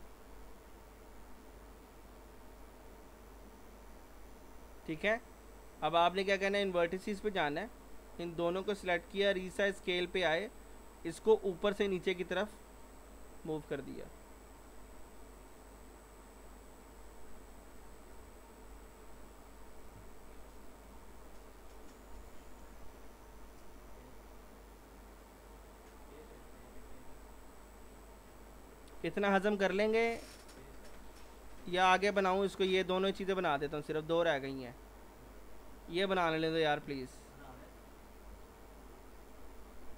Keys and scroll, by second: 9.5 r, 18.7 p, 22.2 F4, 24.2 w, 38.3 F4.